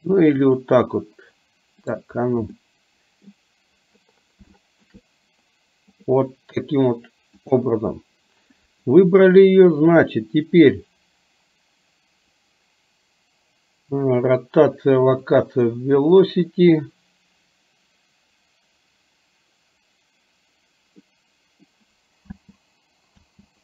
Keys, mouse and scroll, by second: 0.4 click, 2.7-3.4 middle drag, 4.7 shift+middle click, 15.3 click, 16.1 click, 21.2 middle click, 22.4 space, 23.3 space.